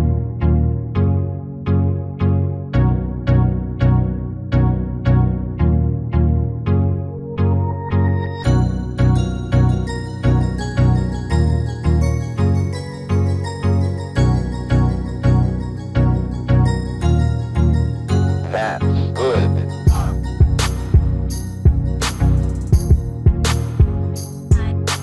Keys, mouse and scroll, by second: 1.6-3.6 drag, 6.0-10.4 drag, 10.4-11.7 middle drag, 12.7 r, 14.2 r, 18.7-23.6 drag, 24.8 g.